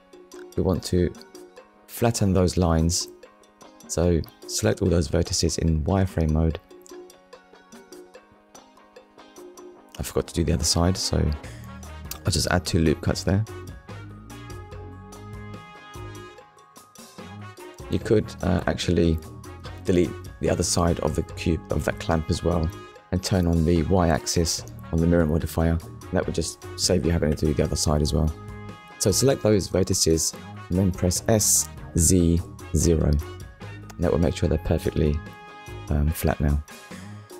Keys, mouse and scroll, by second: 0.0 scroll up 1, 1.3 click, 3.0 click, 3.6 click, 6.3 click, 7.1 middle click, 7.8 scroll down 1, 8.3 middle click, 9.3 z, 9.8 click, 10.2 middle click, 12.2 ctrl+r, 12.8-13.2 scroll up 1, 13.6 right click, 15.0 KP_1, 17.1 click, 17.8 scroll up 1, 19.7 click, 20.3 click, 22.2-22.6 scroll down 2, 22.6 shift+middle click, 23.3 ctrl+middle click, 24.0 shift+middle click, 24.8 ctrl+middle click, 27.8 0, 28.5 Return, 29.2 click, 33.2 Return, 34.3 click, 36.6 click.